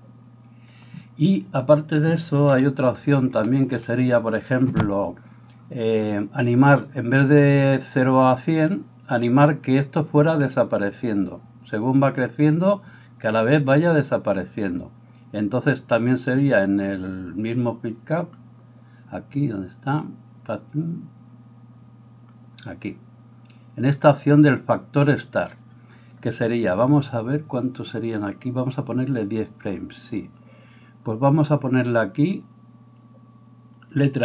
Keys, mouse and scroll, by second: 2.5 KP_7, 14.2-34.2 middle drag.